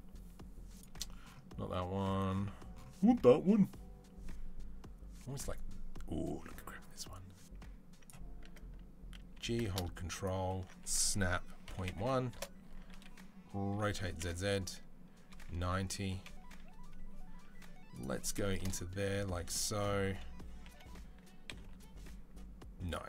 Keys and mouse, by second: 0.6 click, 0.7-6.1 middle drag, 6.1-8.1 drag, 8.1-9.5 middle drag, 9.2 g, 9.6 ctrl+click, 10.5-17.8 middle drag, 10.9 s, 13.6 r, 16.1 KP_1, 17.8-22.7 drag, 20.5 g, 22.7-23.0 middle drag.